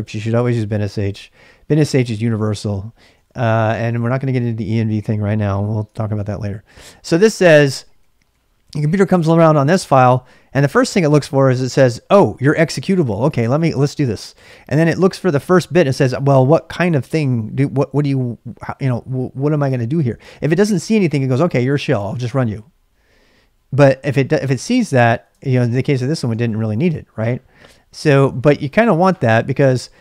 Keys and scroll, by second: 0.0-1.6 typing, 3.0-4.0 typing, 5.8 ctrl+[, 5.8-8.8 typing, 7.3 ctrl+[, 7.3 ctrl+j, 25.1-29.1 typing.